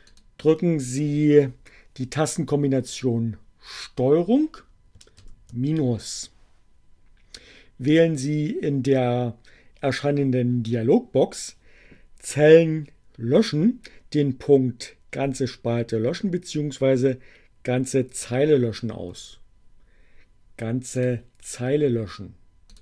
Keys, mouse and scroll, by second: 20.2-21.3 drag, 22.3 click.